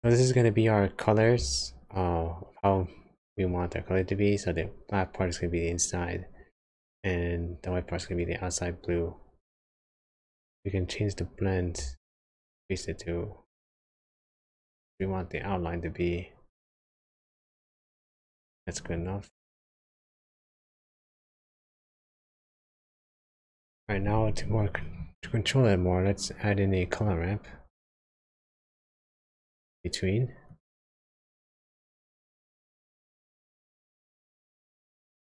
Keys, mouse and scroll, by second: 0.1-2.2 scroll up 1, 10.5-11.8 scroll up 3, 12.0 shift+click, 19.0 click, 20.0 click, 20.3-22.5 scroll down 5, 22.5 click, 23.3 shift+a.